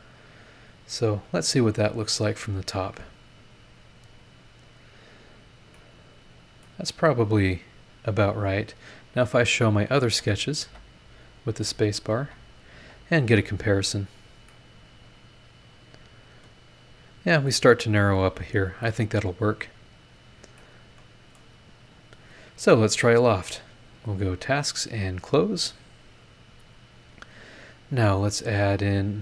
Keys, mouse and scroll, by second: 3.2 click, 3.7 scroll down 2, 4.3 scroll up 2, 5.7 middle click, 5.9 click, 5.9 right click, 7.4-7.9 scroll down 2, 9.8 click, 10.0 space, 10.4 click, 11.3 click, 11.5 space, 12.0 click, 12.2 space, 12.6 click, 12.9 space, 13.1 click, 13.6 scroll down 1, 14.0 scroll up 1, 14.5-17.7 drag, 14.5-17.7 right drag, 19.9-20.4 scroll down 4, 20.6 middle click, 20.7 click, 20.7 right click, 22.3 click, 23.9 click, 24.6 click, 27.3 click, 28.9 click.